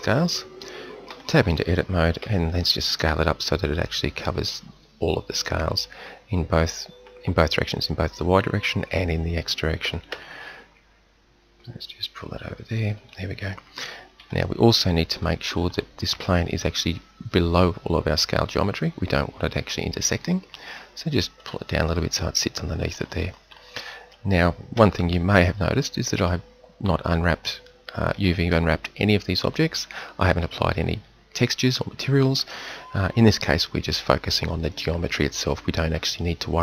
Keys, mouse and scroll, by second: 1.1 Tab, 2.2 s, 9.9 s, 14.2 KP_1, 15.1 Tab, 15.5 middle click, 17.9 click, 19.2-23.5 middle drag, 24.8 z, 33.0 KP_7.